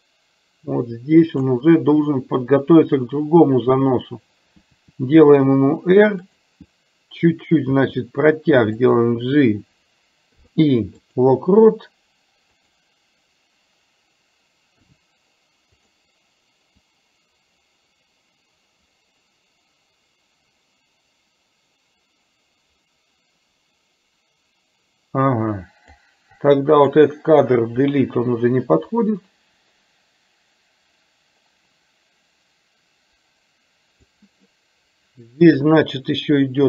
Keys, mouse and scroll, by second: 4.8 r, 7.8 g, 10.3 i, 12.6 click, 14.8 g, 17.0-26.1 drag, 26.5 click, 27.8 Delete, 29.3-34.1 drag.